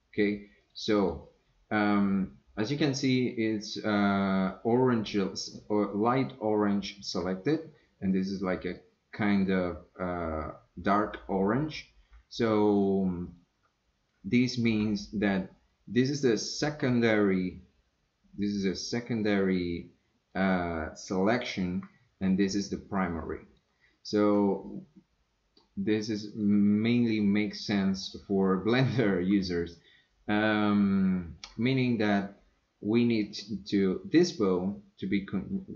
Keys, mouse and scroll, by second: 0.6 click, 1.0 click, 4.2-5.5 drag, 8.1 click, 8.8 click, 13.3 click, 16.6-19.6 drag, 22.2 click, 22.9 click, 26.3 click.